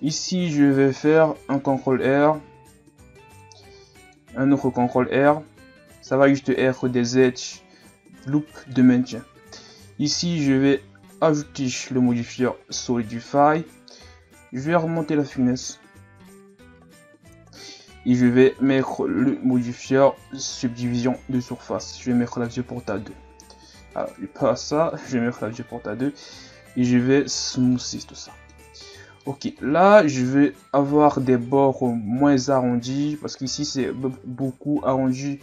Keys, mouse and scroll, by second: 3.7 ctrl+r, 6.3 Tab, 6.8-9.5 middle drag, 11.9 click, 12.8-13.2 middle drag, 13.2-14.0 scroll up 1, 14.0-14.4 scroll up 1, 14.4-17.5 drag, 18.7-19.2 drag, 20.4-22.3 drag, 22.3 click, 24.0 click, 24.9-26.0 drag, 26.0 middle click, 26.8 w, 28.2-28.6 middle drag, 28.6-29.2 scroll up 2, 29.2 middle click, 29.6 Tab, 30.5 alt+right click.